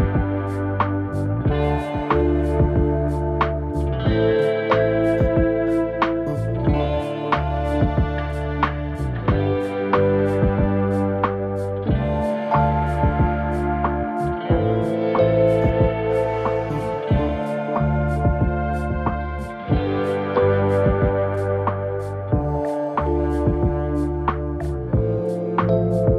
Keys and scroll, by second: 5.2 ctrl+z, 11.2 alt+space.